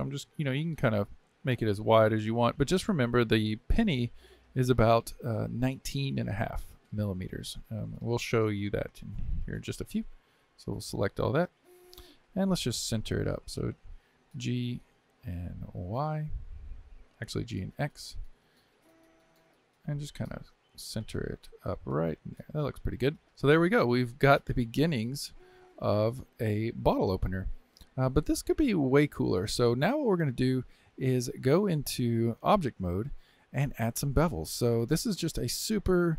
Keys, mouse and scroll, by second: 0.4 scroll down 2, 1.0-6.9 middle drag, 8.3-10.8 shift+middle drag, 10.8 a, 12.5 KP_7, 14.3 g, 23.2-25.8 middle drag, 27.8-29.4 shift+middle drag, 29.4-29.7 scroll up 1, 29.7 shift+middle click, 30.5-30.9 scroll up 2, 30.9-32.4 shift+middle drag, 32.4 Tab, 33.7-36.1 middle drag.